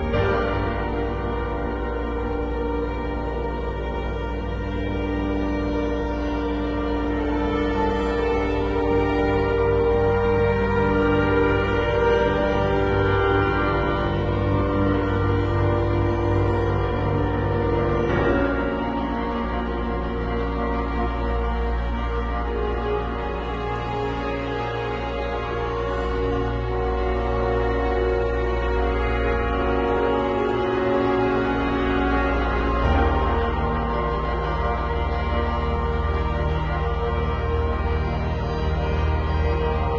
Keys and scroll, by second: 0.0-0.1 typing, 1.8 x, 2.9 z, 4.2 v, 7.5 z, 8.2 space, 9.3 b, 15.2 ], 19.7 [, 20.9 [, 22.8 [, 28.6 x, 29.7 x, 33.9 z, 35.4 v, 35.6 super+z.